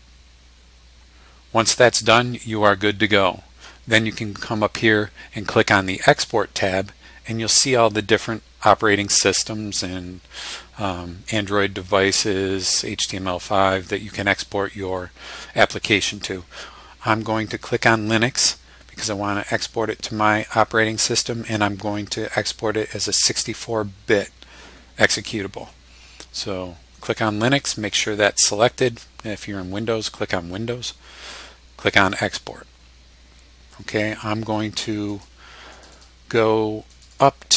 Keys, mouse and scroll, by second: 6.1 click, 17.7 click, 32.0 click, 35.1 click, 35.7 click, 36.9 click.